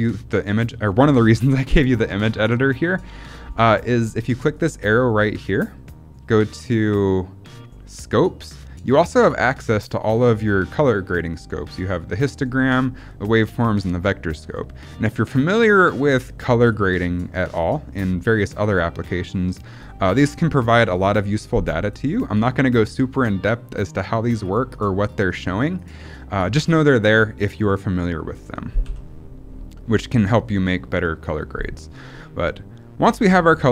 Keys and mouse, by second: 4.4 click, 9.6 middle click, 15.8 click, 17.6-19.0 drag, 24.6 click, 25.0 click, 25.2 click, 25.7 click, 28.8 n.